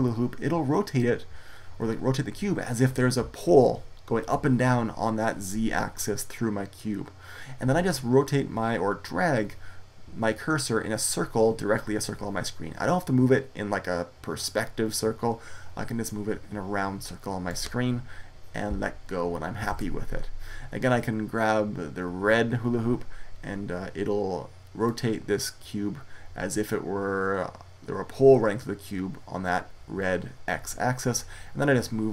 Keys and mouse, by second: 19.6 ctrl+z, 24.7-26.9 middle drag.